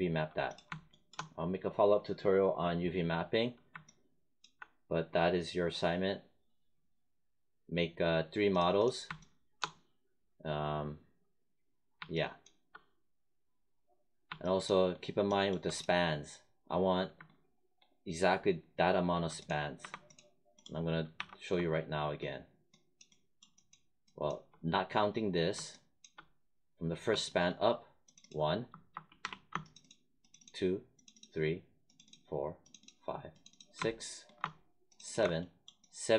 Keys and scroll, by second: 19.7 1, 21.0 1, 29.1 w.